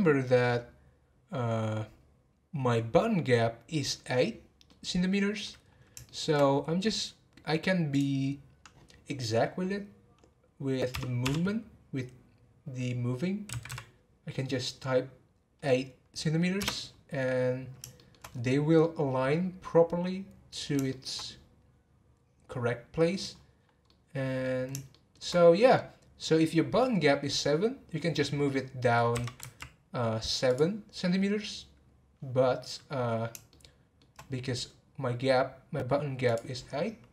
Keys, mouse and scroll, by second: 4.6-5.6 middle drag, 5.6-6.1 scroll up 1, 6.1-7.9 shift+middle drag, 7.9-11.1 drag, 17.9 shift+middle click, 18.3-18.8 scroll up 3, 18.8-21.2 middle drag, 21.2 scroll up 3, 23.2 scroll up 1, 23.3-23.9 scroll down 7, 23.9-27.9 middle drag, 32.5 scroll down 3, 33.5 shift+middle click, 34.3-36.3 scroll up 1, 36.3-37.1 drag.